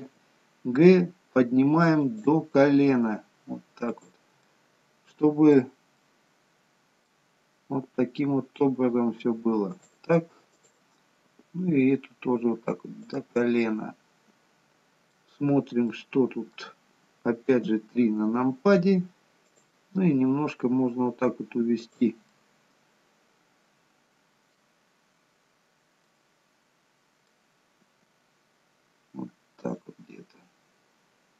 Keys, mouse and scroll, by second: 0.2 g, 3.2 g, 4.5 middle click, 6.1 middle click, 8.0 g, 10.6 click, 11.4 g, 14.1 middle click, 15.9 middle click, 17.6 KP_3, 19.5 click, 20.2 g, 22.4 middle click, 26.3 middle click, 28.0 g, 30.2 middle click.